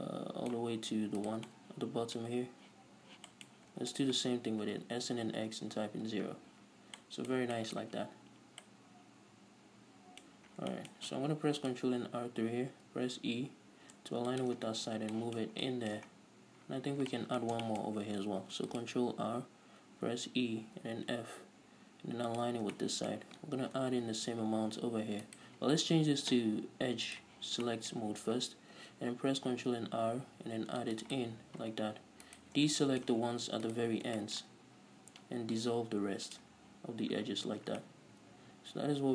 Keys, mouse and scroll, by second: 1.8 ctrl+right click, 1.9-4.3 middle drag, 3.1 z, 4.3 shift+right click, 4.7 s, 6.2 Return, 6.3 a, 7.0-7.4 scroll down 2, 7.4-10.8 middle drag, 10.8-11.1 scroll up 2, 11.1 shift+middle click, 11.7 ctrl+r, 15.0 shift+click, 15.3 scroll down 1, 15.5-22.8 shift+middle drag, 16.5-17.0 scroll down 2, 17.0-17.5 scroll up 2, 18.2-18.8 scroll up 2, 18.8 ctrl+r, 22.8 shift+click, 23.1-25.8 shift+middle drag, 24.0 ctrl+r, 25.8 right click, 27.7 click, 28.0-31.8 shift+middle drag, 29.1 ctrl+r, 31.8 right click, 32.2-32.7 scroll up 1, 32.7-33.0 alt+shift+right drag, 33.0 scroll down 1, 33.2-34.0 shift+middle drag, 34.0 alt+shift+right click, 34.6-39.1 shift+middle drag, 35.7 x, 37.3 scroll down 1, 37.9 scroll up 1.